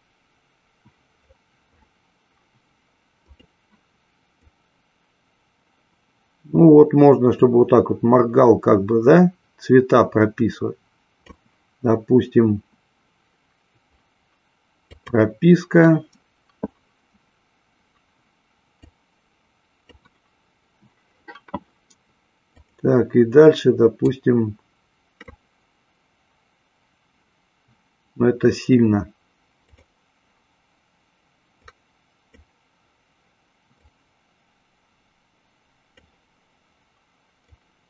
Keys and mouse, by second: 19.2-20.3 drag, 22.6 click, 29.6 click.